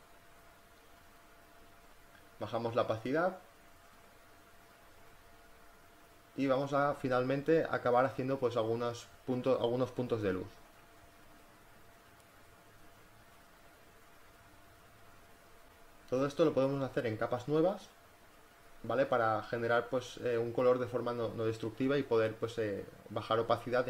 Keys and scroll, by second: 2.5 z, 3.6 b, 4.0 [, 5.2 space, 5.4 [, 16.6 space, 22.2-23.1 typing.